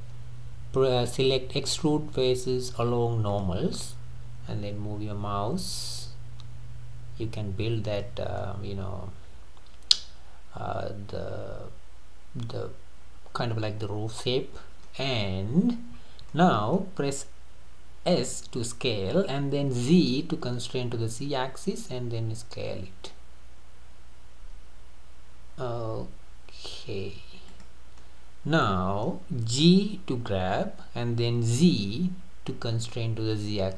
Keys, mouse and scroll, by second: 8.4-11.5 middle drag, 16.0-16.4 scroll up 2, 16.4-18.3 middle drag, 18.3 s, 28.0-30.2 middle drag, 30.2 g.